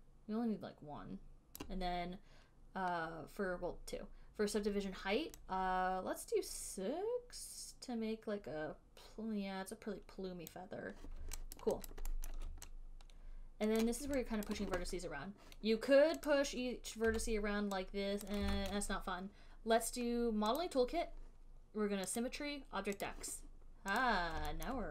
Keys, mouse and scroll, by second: 1.8 click, 5.6-7.1 drag, 10.7 click, 11.8 alt+right click, 12.2 alt+right click, 12.5 alt+middle click, 14.0 right click, 14.8 alt+right click, 16.5 click, 17.4 w, 18.5 click, 18.8 ctrl+z, 20.8 click, 22.5 click, 23.4 click, 24.3 click.